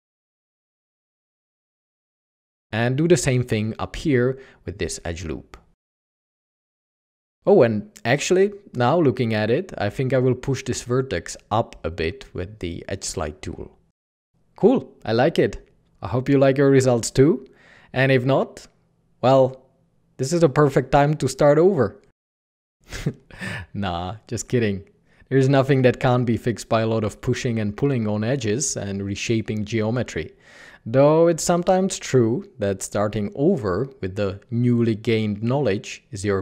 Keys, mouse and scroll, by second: 2.8 g, 6.8 alt+a, 8.9 alt+a, 9.0 Tab, 10.8 ctrl+KP_Add, 11.7 g, 11.8 g, 13.2 typing, 14.4 alt+a, 18.1-18.9 typing, 24.8 h.